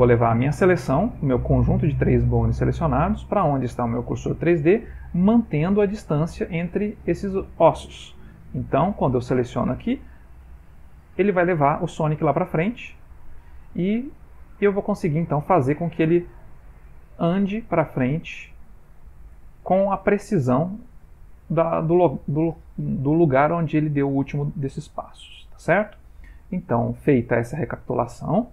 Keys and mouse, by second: 9.3 typing, 12.7 click, 26.8 ctrl+middle click.